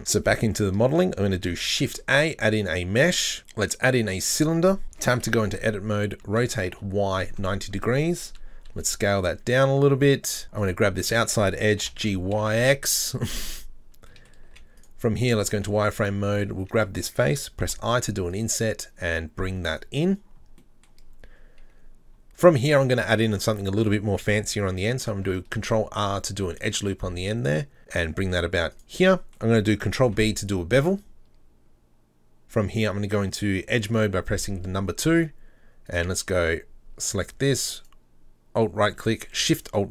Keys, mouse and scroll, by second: 0.0 Tab, 0.3-4.0 middle drag, 4.9 Tab, 6.2 r, 8.7 s, 10.6 alt+right click, 12.6 g, 14.2 middle click, 15.0 z, 15.2 middle click, 15.4-16.3 scroll up 5, 16.3 alt+right click, 18.5 e, 19.9-20.6 scroll down 3, 20.8 middle click, 21.0-22.1 scroll up 4, 22.3 right click, 25.6 ctrl+r, 29.1-30.3 middle drag, 30.0 ctrl+b, 33.9 2, 34.4 scroll up 2, 35.9 alt+right click, 36.6-37.8 scroll up 3, 37.8 alt+right click, 39.7 alt+shift+right click.